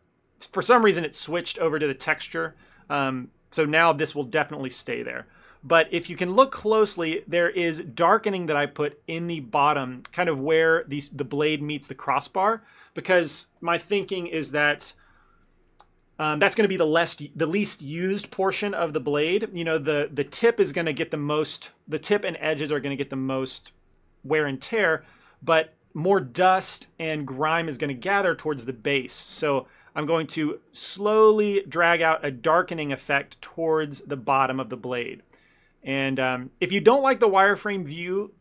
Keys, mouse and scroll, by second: 0.1 shift+middle click, 0.5 shift+middle click, 5.3 ctrl+middle click, 5.7 shift+middle click, 6.0 ctrl+middle click, 6.4 ctrl+middle click, 6.5 shift+middle click, 6.7 ctrl+middle click, 7.1 shift+middle click, 10.6 ctrl+middle click, 11.0 shift+middle click, 20.4 ctrl+middle click, 20.8 shift+middle click, 25.6 ctrl+middle click, 28.9 ctrl+middle click, 29.2 f, 29.6 ctrl+middle click, 30.4 click, 31.0 click, 31.4 click, 31.5 click, 31.8 click, 32.1 click, 32.7 shift+middle click, 32.8 ctrl+middle click, 33.1 f, 33.6 click, 33.8 click, 34.1 click, 34.3 ctrl+middle click, 35.8 shift+middle click, 36.1 ctrl+middle click, 36.8 shift+middle click.